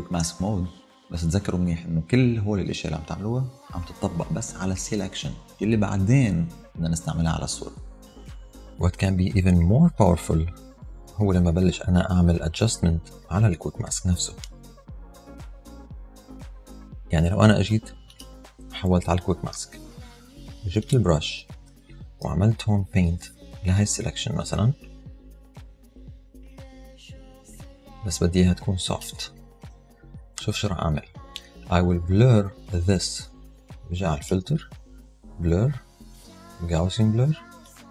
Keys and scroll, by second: 22.3 ].